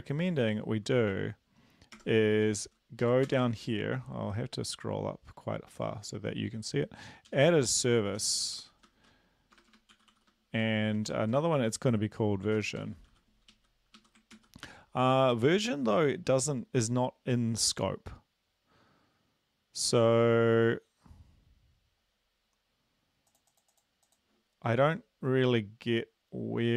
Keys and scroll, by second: 2.0 Tab, 2.3 End, 3.0 Left, 3.2 Return, 7.4-11.3 typing, 12.5-13.1 typing, 13.5 Right, 13.9 Right, 14.3 ctrl+s.